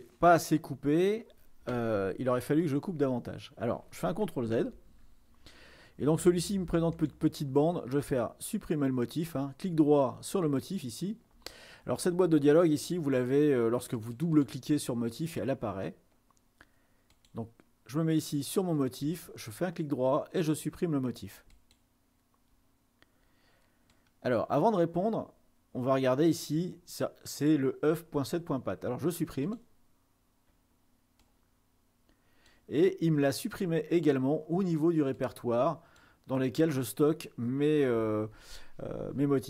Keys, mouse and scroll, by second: 4.8 ctrl+z, 7.0 click, 10.8-12.0 drag, 14.0-15.6 drag, 17.1-18.4 drag, 19.2-20.3 drag, 21.6 click, 24.1-26.6 drag, 26.7 click, 29.8 click, 31.3-33.6 drag, 35.4-36.6 drag, 36.6 middle click.